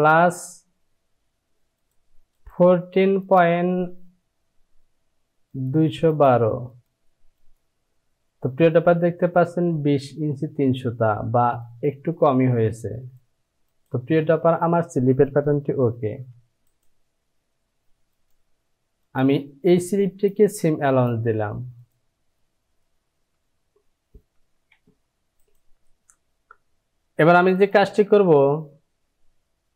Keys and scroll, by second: 16.2 j, 24.7 Down.